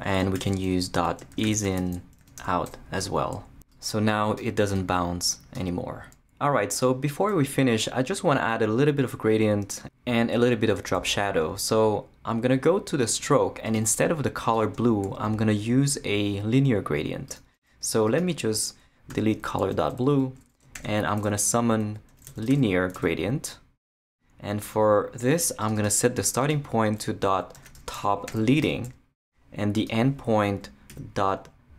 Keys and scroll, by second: 0.0-2.9 typing, 19.1 shift+BackSpace, 20.7 shift+super+l, 21.6-23.0 typing, 27.3-28.3 typing, 28.6 Return, 30.9 ..